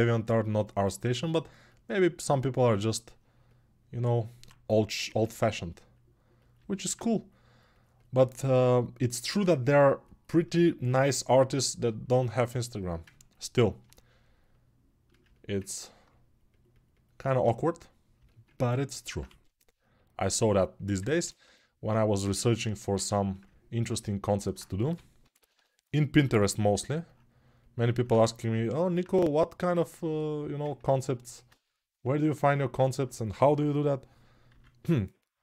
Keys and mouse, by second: 19.0 2, 24.6 g, 25.7 ].